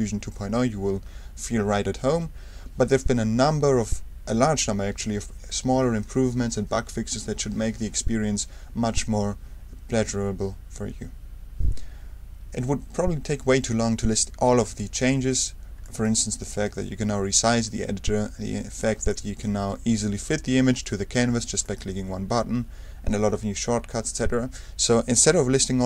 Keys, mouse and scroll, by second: 15.8 super+click, 16.4 super+right click, 21.6 click.